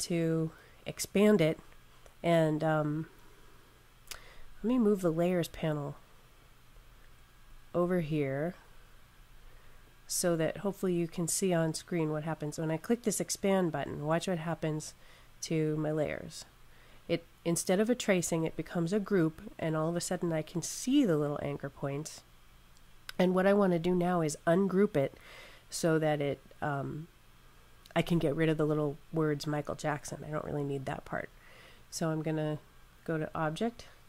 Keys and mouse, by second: 6.3 click, 15.3 click, 33.0 click.